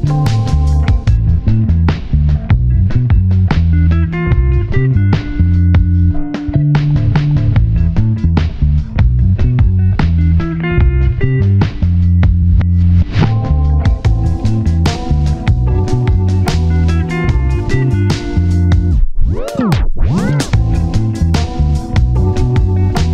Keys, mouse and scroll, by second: 2.3 scroll up 1, 2.4 scroll down 1, 2.7 1, 2.9 scroll up 1, 3.0 scroll down 1, 3.3-4.2 scroll up 1, 5.0-5.4 scroll down 1, 5.9 middle click, 6.0-7.3 scroll down 1, 7.3 scroll up 1, 7.5 middle click, 7.7-8.0 scroll down 1, 8.0 1, 8.7-9.3 scroll up 1, 10.0 middle click, 10.2-11.5 scroll up 2, 10.4 middle click, 14.8-15.5 scroll down 1, 22.2 scroll up 1, 22.4 scroll down 1.